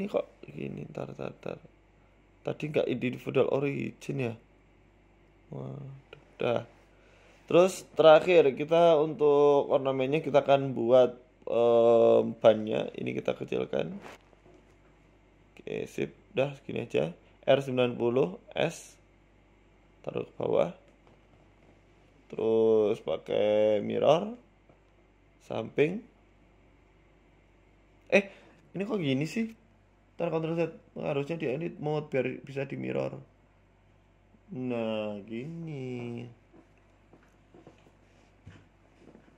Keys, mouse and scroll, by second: 0.4-0.7 scroll up 3, 0.6 middle click, 1.6 KP_7, 2.2 z, 3.1 right click, 3.2 Tab, 3.7 click, 4.3 s, 6.9 Tab, 7.1 middle click, 7.5-8.0 scroll down 5, 7.7 middle click, 8.1 middle click, 8.5-8.8 scroll up 3, 8.8 shift+a, 9.7 shift+s, 10.8 shift+a, 12.8 click, 13.1 middle click, 14.1 shift+click, 17.3 click, 17.8 KP_1, 18.4 r, 19.8 s, 21.1 g, 22.6 middle click, 22.9-23.2 scroll down 1, 23.2 KP_3, 24.0 click, 25.9-26.2 scroll up 2, 26.1 shift+middle click, 26.7 g, 28.9 shift+middle click, 29.1-29.5 scroll up 4, 29.4 shift+middle click, 31.3 ctrl+z, 31.9 Tab, 32.4 g, 35.2 click, 35.4 click, 35.9 click, 36.3 shift+middle click, 36.5 middle click, 37.0 shift+middle click, 37.2-38.1 scroll up 3, 37.7 KP_1, 38.1 shift+middle click, 39.3 click.